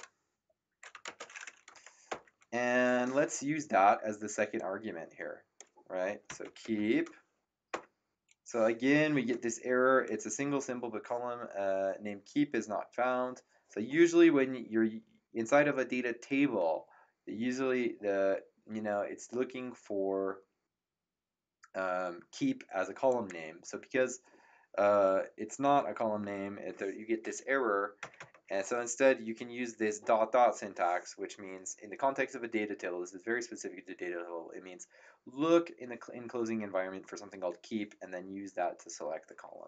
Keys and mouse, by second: 0.0-1.0 typing, 2.1 Return, 4.5 click, 6.0-7.2 typing, 7.7 Return, 23.0 click, 28.0 typing.